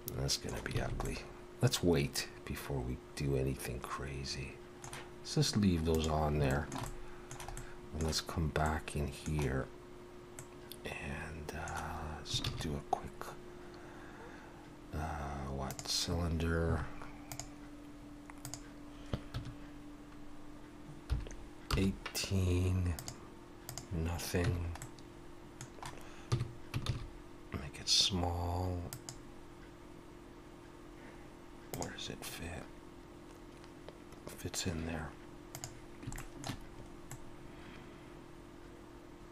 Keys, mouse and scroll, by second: 0.8 alt+a, 1.0 middle click, 5.9 click, 6.5 shift+middle click, 6.8 middle click, 7.5 middle click, 7.9 shift+middle click, 12.4 shift+a, 17.3 click, 18.4 click, 22.9 click, 24.5 Tab, 24.8 middle click, 26.3 s, 36.2 shift+middle click, 36.8-38.0 scroll up 2, 37.1 middle click.